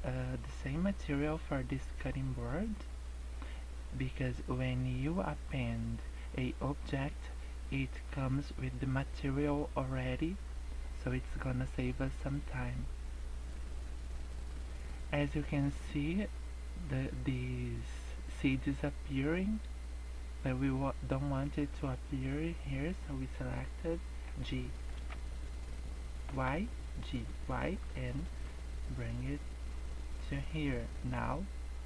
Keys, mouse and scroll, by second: 13.4-14.3 scroll up 1, 14.3-15.3 scroll down 1, 22.0 click, 24.2 g, 29.5 scroll up 1, 29.8-30.2 scroll down 3.